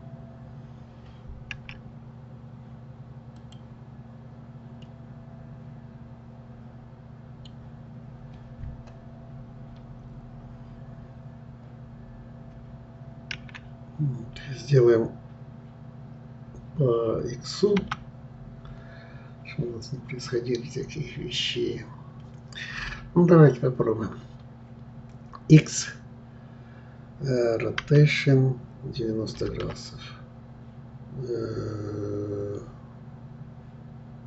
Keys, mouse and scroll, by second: 4.8-7.8 middle drag.